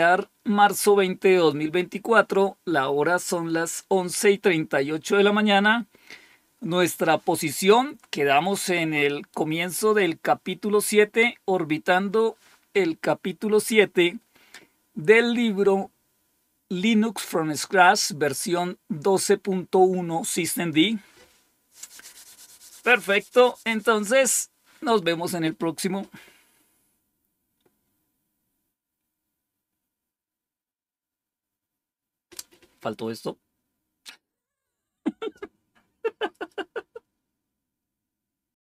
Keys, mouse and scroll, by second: 38.4 click.